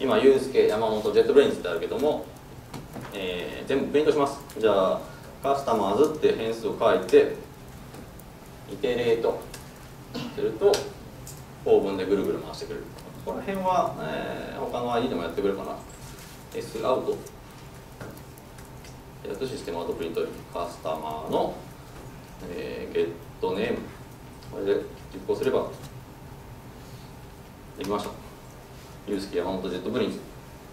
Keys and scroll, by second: 5.7 Tab, 7.1 alt+Return, 18.6 Tab, 20.9 Tab, 24.7 ctrl+shift+F10.